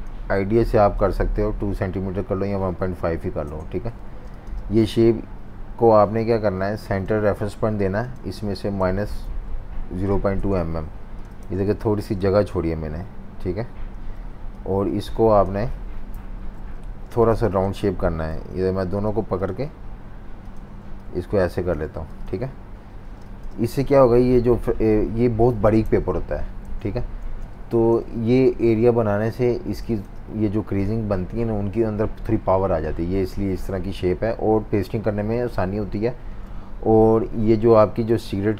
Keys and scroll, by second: 3.4 Return, 4.0 typing, 8.5-9.9 typing, 10.4 Return, 11.4 typing, 12.3 super+y, 13.9 super+y, 15.7-18.3 typing, 16.1 super+-, 16.3 super+-, 16.4 super+-, 22.1-23.2 typing, 25.8 super+-, 25.9 super+-, 26.7-29.8 typing, 37.2 F18.